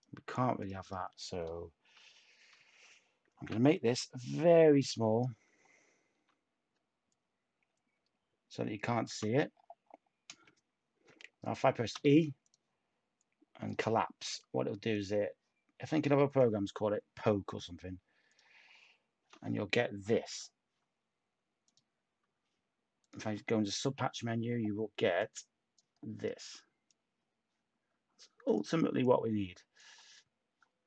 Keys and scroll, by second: 3.2 h, 6.1 ctrl+z, 11.9 e, 15.0 e, 17.6 Tab, 22.2 Tab, 23.8 /, 29.9 Tab.